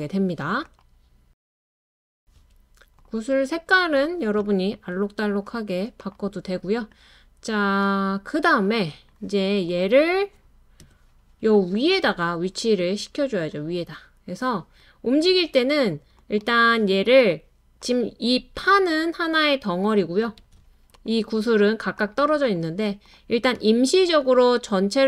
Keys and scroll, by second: 11.0 BackSpace, 20.4 super+z.